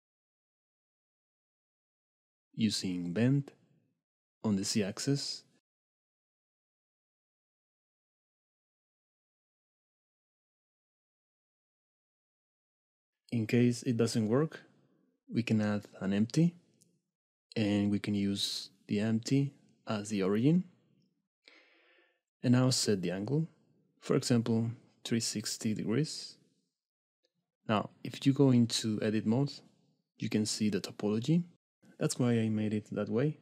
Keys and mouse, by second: 1.9 shift+middle click, 3.8 click, 5.7 click, 8.1 Tab, 8.6 click, 9.7 shift+middle click, 10.5 click, 12.0 shift+s, 13.3 Tab, 13.7 shift+a, 16.5 click, 21.8 middle click, 23.0-24.0 drag, 24.9 shift+middle click, 25.5 middle click, 27.9-28.4 middle drag, 28.6 Tab, 29.2 click.